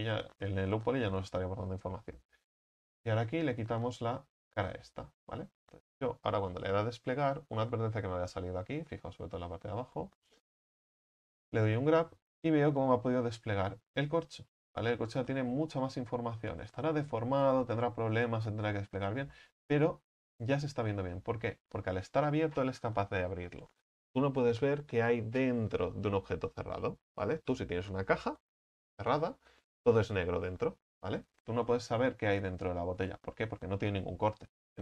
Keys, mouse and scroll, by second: 4.1 x, 4.7 middle click, 5.0 scroll down 2, 5.3 a, 11.6 u, 14.4 scroll up 14, 15.8 right click, 16.2-17.5 middle drag, 17.5-17.9 scroll down 5, 19.4 middle click, 19.7 scroll down 1, 19.8-21.0 scroll up 1, 21.4 a, 21.6 a, 31.2-31.7 scroll down 2, 31.7-34.8 middle drag.